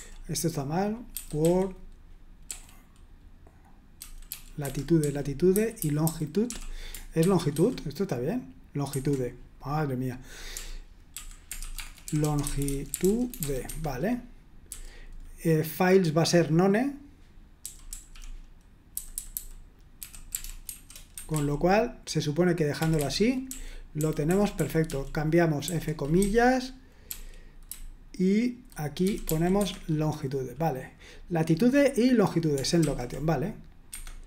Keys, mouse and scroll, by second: 0.0-2.5 typing, 3.9-8.5 typing, 4.6 Escape, 7.2 super+1, 7.5 super+2, 8.9 super+1, 10.5-14.7 typing, 17.4-21.3 typing, 21.2 Escape, 22.8-29.3 typing, 29.6 Escape, 32.8 shift+;, 33.9 Escape, 33.9-34.2 typing.